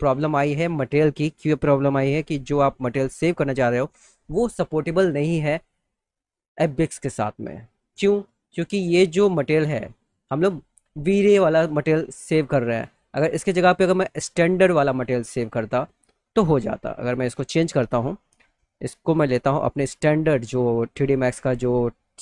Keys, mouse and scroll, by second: 2.8-7.1 drag, 7.9 click, 8.9 click, 14.6 click, 16.8 click, 19.8 click, 20.5 click.